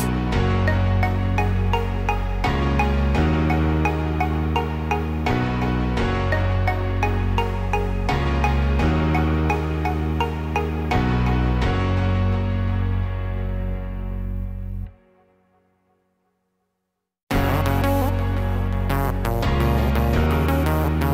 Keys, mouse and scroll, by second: 5.7 e, 9.7 r, 12.4 e, 16.0 middle click, 18.5 middle click.